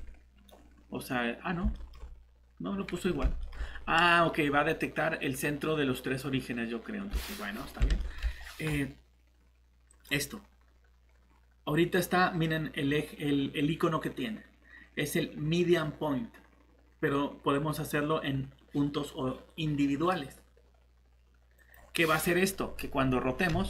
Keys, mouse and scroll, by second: 1.5 scroll up 1, 1.7 middle click, 7.1-7.6 scroll up 1, 7.6-7.9 scroll down 1, 8.0 middle click, 9.9 click.